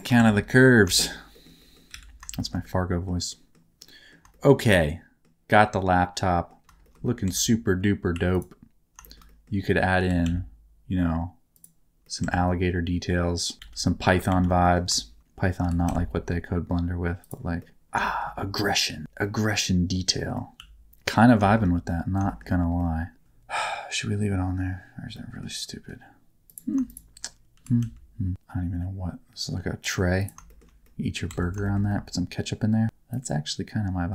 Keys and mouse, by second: 0.2 Tab, 1.0 middle click, 1.3 middle click, 1.6 middle click, 1.9 alt+a, 2.4 shift+middle click, 2.6 middle click, 3.3 middle click, 3.8 middle click, 4.3 shift+middle click, 4.6 middle click, 5.5 middle click, 6.8 shift+middle click, 7.2 Tab, 8.1 2, 8.3 click, 9.0 shift+middle click, 10.0 g, 10.2 z, 11.5 click, 12.0 middle click, 12.2 Tab, 12.4-13.5 middle drag, 13.6 ctrl+z, 13.8 middle click, 14.3 ctrl+z, 14.6 middle click, 15.6 g, 15.8 z, 17.2 middle click, 17.6 middle click, 17.8 Tab, 18.0 middle click, 18.4 middle click, 19.2 middle click, 20.2 middle click, 20.6 s, 20.9 Tab, 20.9 middle click, 21.4 middle click, 22.2 middle click, 22.8 middle click, 25.1 middle click, 26.5 click, 27.5 g, 27.8 z, 30.2 click, 30.5 shift+middle click, 30.8 middle click, 31.5 shift+Tab, 31.6 middle click, 31.9 middle click, 33.1-34.1 drag.